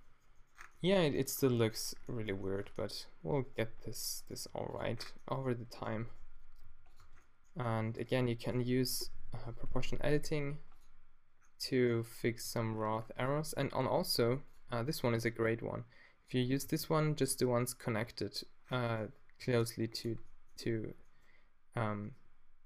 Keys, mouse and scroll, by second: 0.1 click, 2.6 Tab, 2.8 middle click, 3.5-4.5 middle drag, 3.6 g, 4.3 g, 4.6 click, 5.0 middle click, 6.6 g, 7.0 Tab, 7.7 Tab, 7.7-8.9 middle drag, 9.1 o, 9.6 middle click, 12.3 g, 13.3 click, 15.2-16.4 drag, 16.7 g, 19.4 g, 20.0 click.